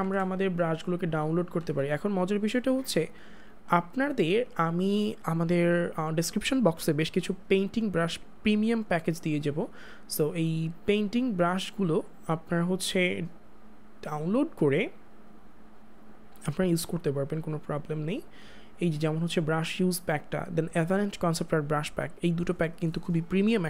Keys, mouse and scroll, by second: 0.0 ctrl+z, 3.7 click, 11.1 click, 20.0 click.